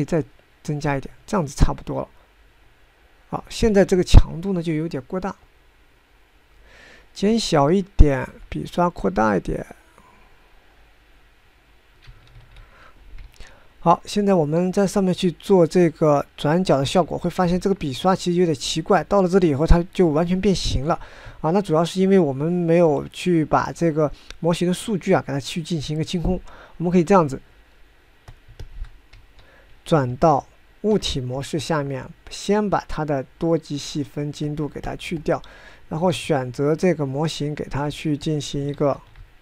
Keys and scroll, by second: 0.1 ctrl+z, 4.8 ctrl+z, 9.3 f, 13.4 ctrl+z, 14.3 9, 21.7 ctrl+z, 30.3 ctrl+Tab, 30.4 9, 31.3 ctrl+Tab, 31.8 ctrl+Tab, 31.9 ctrl+Tab, 32.0 ctrl+Tab, 32.2 ctrl+Tab, 37.4 ctrl+Tab, 37.9 ctrl+Tab, 38.0 ctrl+Tab, 38.1 ctrl+Tab, 38.2 ctrl+Tab.